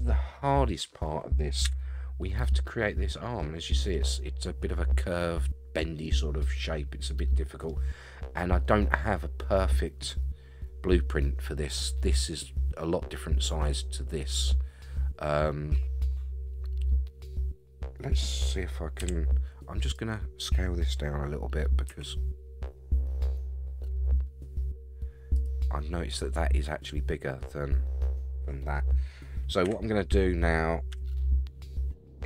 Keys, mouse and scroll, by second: 1.6 KP_1, 2.6 scroll up 1, 3.1 scroll down 3, 3.4-3.9 middle drag, 6.0-7.6 middle drag, 15.7-18.1 middle drag, 19.0 KP_3, 19.8 click, 21.9 s, 28.6 scroll down 1, 29.6 KP_1, 30.9 KP_3.